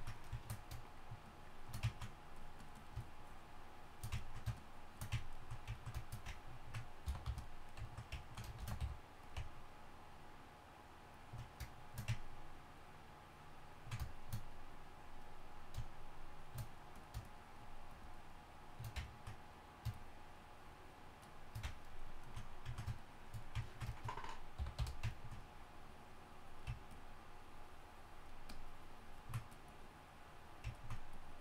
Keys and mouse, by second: 1.9-4.3 drag, 7.0 y, 7.2 f, 8.6 shift+c, 8.8 f, 24.6 y, 24.8 f.